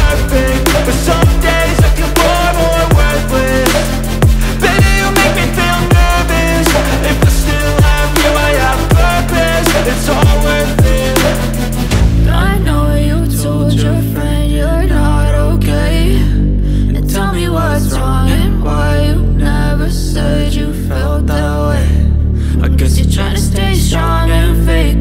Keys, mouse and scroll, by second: 0.9-3.9 drag, 7.7-12.5 drag, 12.5 space, 13.8-15.6 scroll up 3, 15.6-16.2 scroll down 1, 19.6 space, 20.9 ctrl+s, 22.1 click, 24.1 shift+a.